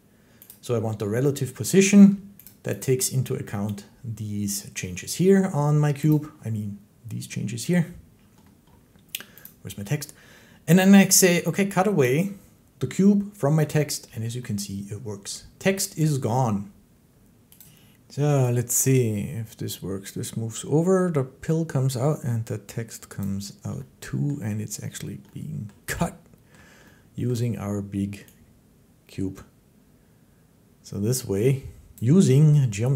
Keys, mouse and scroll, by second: 0.4 click, 2.3 click, 2.7 click, 6.0 click, 9.3 click, 11.9 click, 17.5 click, 17.5 click, 23.0 click, 24.1 click, 25.5 click, 27.1 middle click, 31.8 click.